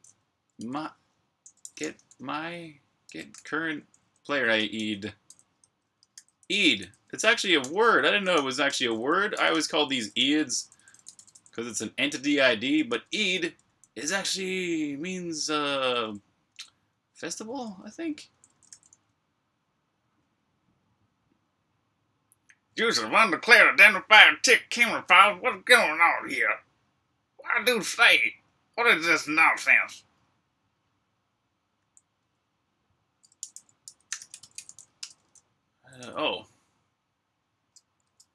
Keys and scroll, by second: 0.0-6.0 typing, 7.1-8.1 typing, 12.7 Escape, 12.7-13.5 typing, 14.8-18.5 typing, 31.4-35.8 typing, 38.0 ⟲.